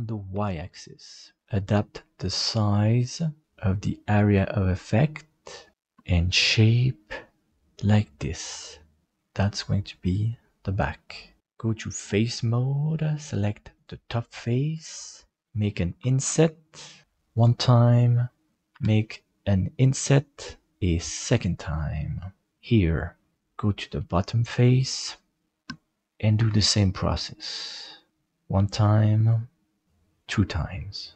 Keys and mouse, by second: 9.0-11.4 middle drag, 12.0 click, 13.7 right click, 15.1 middle click, 16.0 i, 18.8 i, 23.3 middle click, 24.8 right click, 26.5 i, 29.0 i.